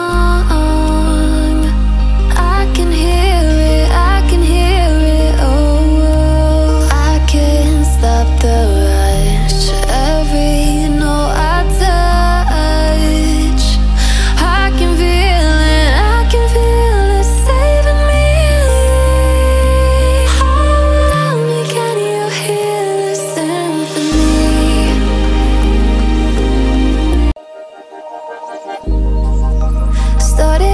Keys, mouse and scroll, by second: 3.0-7.5 drag, 12.6 alt+scroll up 1, 13.9 click, 21.5 alt+shift+click, 25.3 ctrl+shift+], 27.4 click.